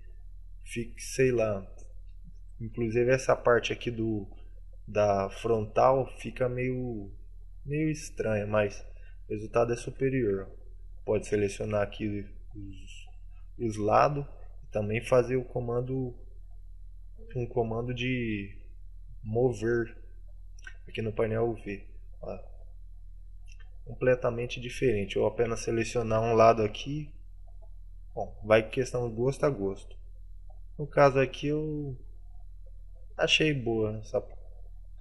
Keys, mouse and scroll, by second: 5.9 middle click, 8.7 middle click, 9.9 Tab, 10.3 right click, 10.5 middle click, 11.6 shift+right click, 12.0 middle click, 13.6 middle click.